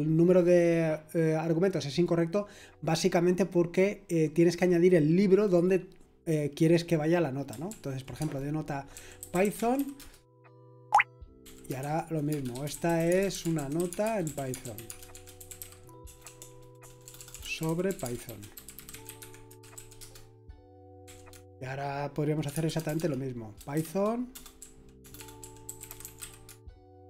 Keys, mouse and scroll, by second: 7.7 ctrl+p, 8.2-27.0 typing, 10.9 Return.